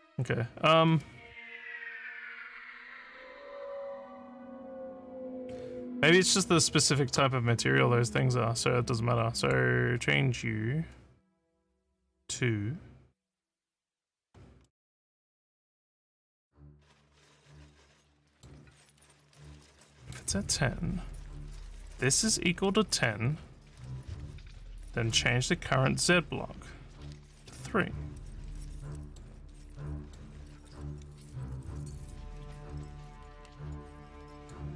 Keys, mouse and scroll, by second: 9.4 click, 14.6-18.4 middle drag, 19.6 click, 28.4 middle click, 29.6 middle click, 34.4 click.